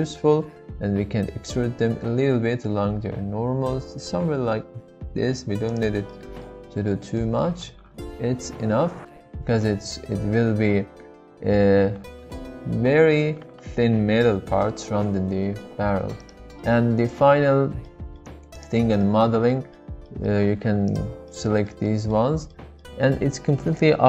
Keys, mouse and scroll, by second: 5.7 shift+click, 6.1 middle click, 7.3-10.7 middle drag, 15.3 Tab, 15.6-17.1 middle drag, 17.1 Tab, 18.5 click, 19.0-20.0 middle drag, 21.3 middle click, 21.8 middle click, 22.5-24.0 middle drag.